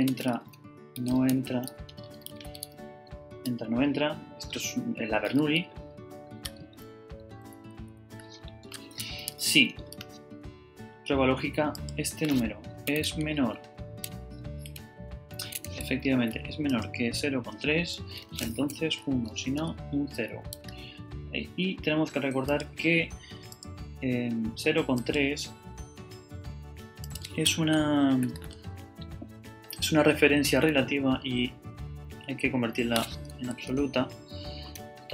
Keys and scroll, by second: 0.0-3.1 typing, 3.3 Return, 5.9 shift+super+BackSpace, 7.3 Up, 7.7 Down, 8.5 shift+Down, 8.6-9.9 typing, 12.9 <, 14.4 BackSpace, 15.6 <, 18.2-20.5 typing, 34.8 F4.